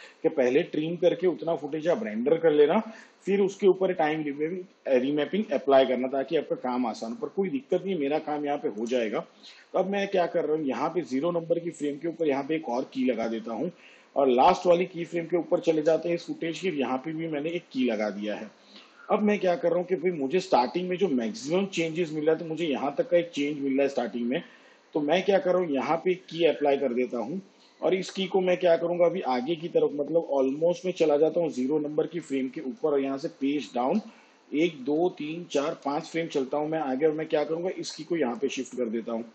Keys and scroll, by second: 32.0 Home, 33.1 shift+Page_Down, 34.4 ctrl+Right.